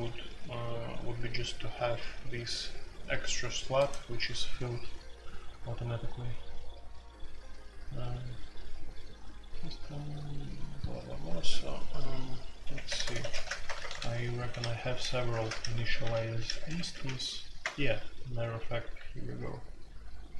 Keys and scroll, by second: 12.6-16.9 typing, 17.6 Return, 18.5 Escape, 18.7-20.3 typing.